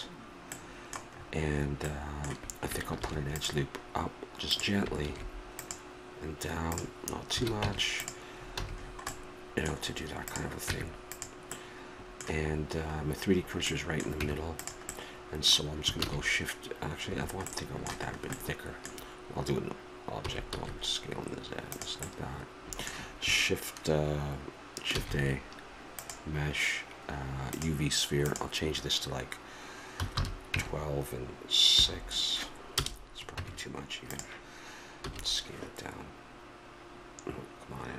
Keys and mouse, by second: 1.8 middle click, 3.0 ctrl+r, 5.0 ctrl+r, 7.3 a, 7.6 Tab, 8.0-11.2 drag, 8.5 a, 10.7 Tab, 14.2 Tab, 15.9 shift+a, 20.2 s, 22.1-24.1 middle drag, 24.9 shift+a, 28.2 click, 29.4 click, 33.4 Tab, 35.1 s.